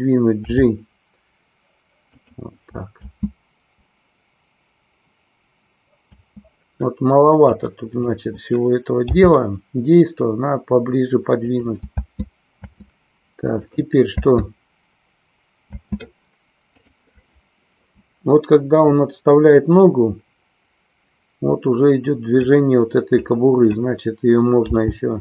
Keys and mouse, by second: 2.2 click, 3.0 space, 6.1 space, 7.6 click, 12.0 space, 13.7 click, 18.9-22.5 drag, 23.2 click.